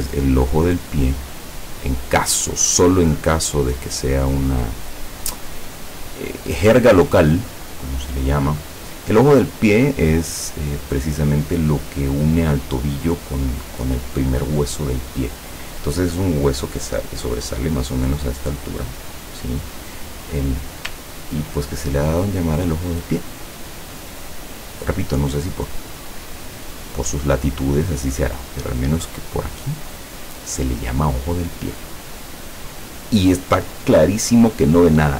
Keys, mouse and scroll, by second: 0.7 click, 2.2 click, 3.1 click, 4.4 click, 6.5 click, 7.1 click, 9.9 click, 21.1 ctrl+scroll up 2, 23.1 click, 26.1 click, 27.5-29.0 drag, 29.4 click, 31.3 click, 32.0 click.